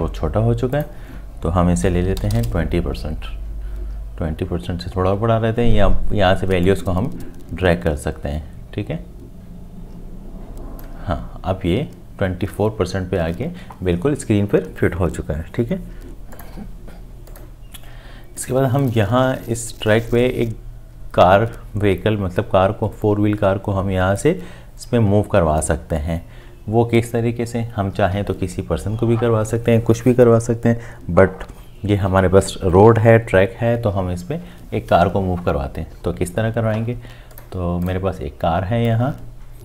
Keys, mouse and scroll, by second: 2.1 KP_2, 2.3 Return, 2.3 0.